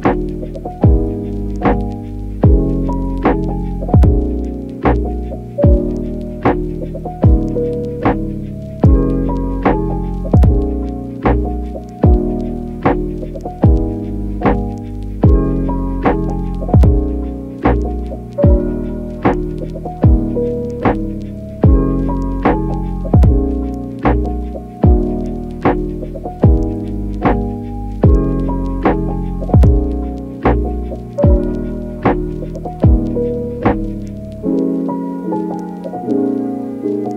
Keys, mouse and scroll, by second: 0.5 ctrl+z, 2.8 ctrl+z, 4.0 ctrl+z, 4.3 ctrl+z, 6.5 click, 6.9 click, 7.9 click, 8.3 click, 9.3 click, 9.6 click, 11.5 middle click, 13.1 middle click, 13.4 click, 13.6 middle click, 14.6 alt+q, 15.1 alt+middle click, 15.7 alt+shift+click, 16.4 middle click, 17.0 click, 17.3 click, 17.9 click, 18.3 click, 18.8 click, 20.2 ctrl+z, 20.4 ctrl+z, 21.3 ctrl+z, 23.6 click, 24.0 click, 27.3 ctrl+z, 28.6 click, 29.8 click, 31.0 click, 31.2 click, 33.0 click, 35.0 click, 35.6 alt+q, 35.6 click, 36.1 shift+click.